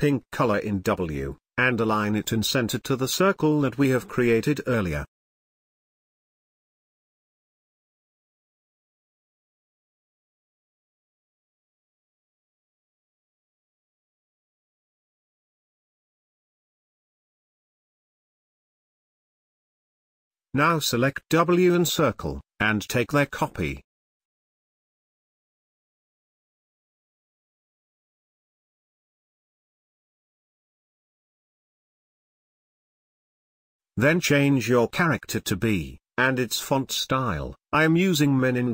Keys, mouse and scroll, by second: 2.2 ctrl+z, 3.3 click, 6.5 click, 10.3-22.5 alt+shift+drag, 22.5-28.0 alt+drag, 30.0 t, 30.2 click, 32.0 shift+b, 33.8 click, 33.9 click, 35.9 typing.